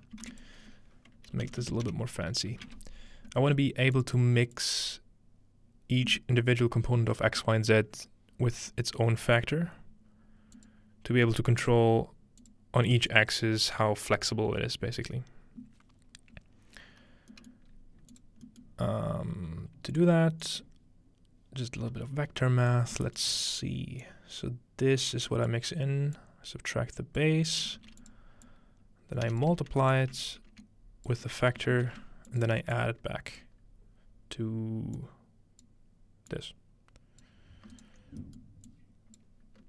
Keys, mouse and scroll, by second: 0.0-0.8 scroll down 1, 0.3-3.0 typing, 0.4 shift+click, 0.8-2.1 ctrl+shift+drag, 3.9-6.3 drag, 17.3-17.7 middle drag, 17.7-18.1 scroll up 1, 18.1 click, 19.9 click, 20.4 click, 22.7 click, 22.9 s, 24.0-25.1 drag, 25.3 click, 26.2-27.7 drag, 27.8 shift+d, 28.1 click, 28.5-30.2 drag, 29.9-31.7 alt+right drag, 31.1-36.2 ctrl+drag, 31.7 ctrl+shift+d, 36.4-37.7 drag, 38.7-39.6 drag.